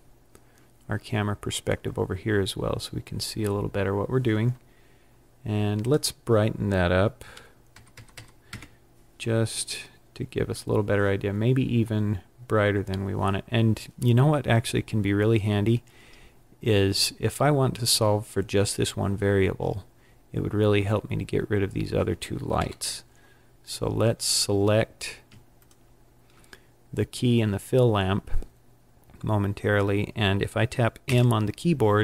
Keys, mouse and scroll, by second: 5.7 click, 7.8 KP_0, 19.5-21.2 scroll down 11, 21.6-22.5 scroll up 5, 22.5 KP_1, 24.1 click, 25.5 shift+click, 30.9 m.